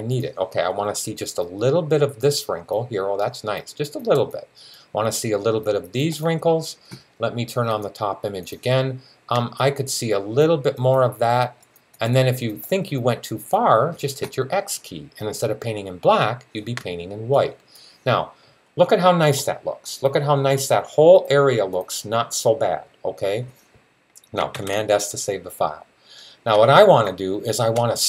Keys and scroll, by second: 24.4 super+s.